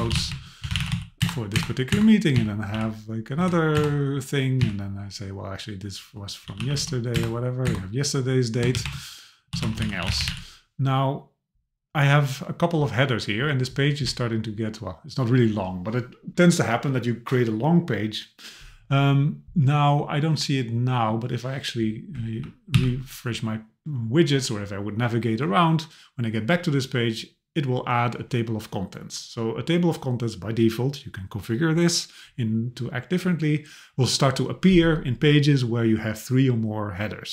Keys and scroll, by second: 1.2 Return, 3.8 Return, 7.1 Return, 22.7 alt+q.